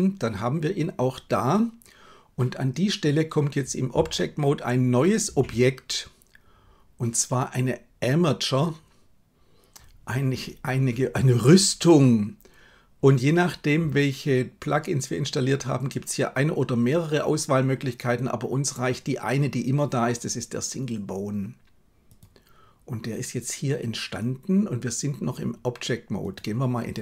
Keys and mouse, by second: 26.3-27.0 drag.